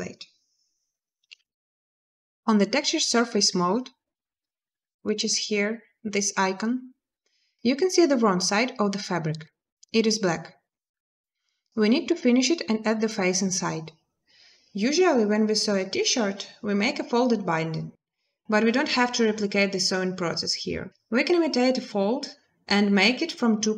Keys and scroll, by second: 1.1 space.